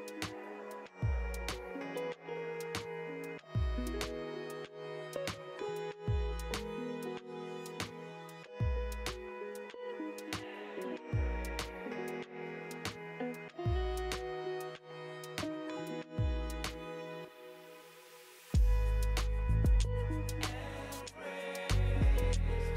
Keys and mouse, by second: 0.0 middle click, 0.4 Right, 0.5 Right, 0.5 Left, 0.6 Right, 0.6 Left, 0.7 Right, 0.7 Left, 0.8 Right, 0.8 Left, 1.3 middle drag, 1.5 space, 2.3 space, 2.3 drag, 2.6 space, 2.8 space, 2.8 click, 4.1 x, 4.2 drag, 4.4 shift+a, 4.8 click, 4.9 ctrl+g, 5.3 middle click, 5.5 middle click, 5.7 space, 6.1 space, 6.4 ctrl+z, 7.5 x, 7.7 click, 7.8 ctrl+z, 8.8 click, 9.3 drag, 9.9 shift+click, 9.9 x, 10.2 shift+a, 10.8 ctrl+g, 11.1 click, 11.3 click, 11.4 ctrl+z, 11.5 click, 11.9 space, 12.3 space, 12.8 space, 13.0 space, 14.5 x, 14.7 shift+a, 14.9 BackSpace, 15.2 click, 15.3 ctrl+g, 15.7 click, 16.0 ctrl+z, 16.0 click, 16.2 click, 16.4-18.8 typing, 16.7-17.1 drag, 17.5 shift+click, 17.9 click, 18.3 click, 18.8 click, 19.0 click, 19.9 click, 20.0 BackSpace, 20.2 BackSpace, 21.4 x, 21.8 shift+a, 22.3 g, 22.6 click.